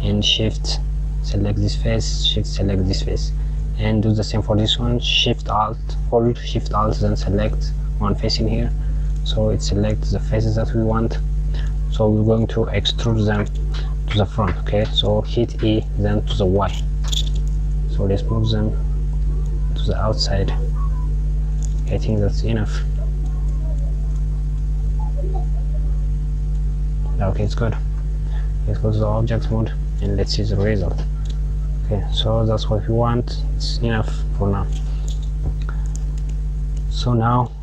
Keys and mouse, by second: 0.9 shift+click, 2.3 shift+click, 6.9 alt+shift+click, 8.8 click, 15.0 e, 27.4 Tab, 28.5 click, 29.2 click, 36.2 click.